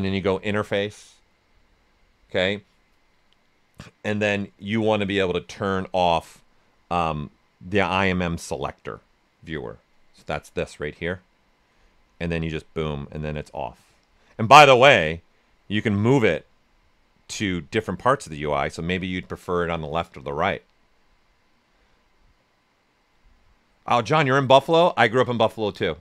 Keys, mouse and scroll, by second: 0.0 click, 11.9 click, 12.4-20.7 drag.